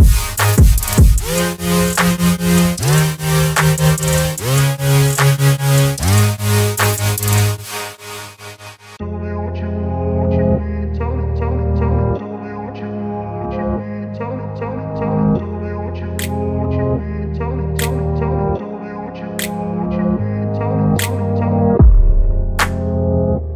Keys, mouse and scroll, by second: 4.0 click, 5.7 right click, 6.6 click, 8.9-12.3 shift+click, 18.2 right click, 18.9 click, 22.1 click, 22.2 click.